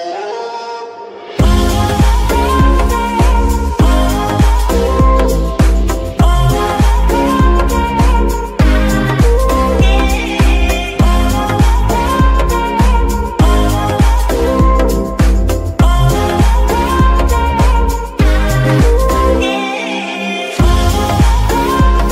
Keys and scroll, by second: 5.6 ctrl+shift+Tab, 10.2 g, 10.6 Escape, 14.3 g, 15.0 Escape, 17.7 g, 18.1 Escape, 20.8 g, 21.2 Escape.